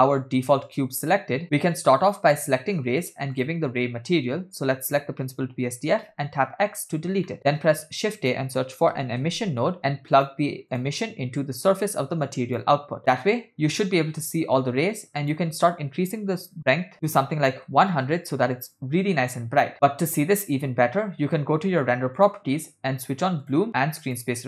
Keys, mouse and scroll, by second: 2.1 click, 3.4 click, 6.9 x, 7.4 middle click, 7.4 shift+a, 11.4-13.0 drag, 14.9-15.2 scroll up 2, 15.2-17.8 drag, 17.2 0, 22.2 click, 24.2 click.